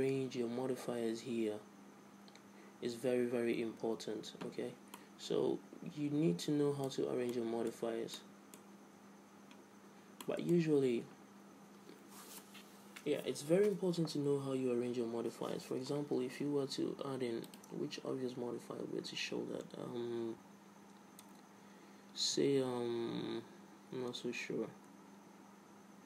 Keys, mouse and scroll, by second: 5.2-7.0 middle drag, 7.5-10.3 middle drag, 10.4-12.4 middle drag, 17.7-19.6 drag.